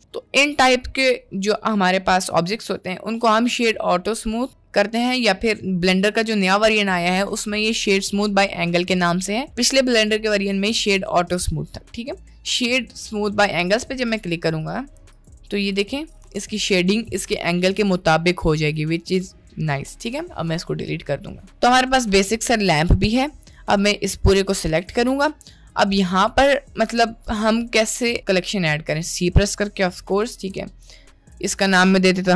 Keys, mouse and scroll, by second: 0.5-0.9 middle drag, 4.7-13.9 right drag, 14.9 right click, 16.4 click, 19.9 Delete, 20.6-22.2 middle drag, 22.8 middle click, 23.6-24.9 drag, 25.3-25.7 middle drag, 30.4 c, 31.4-32.3 drag.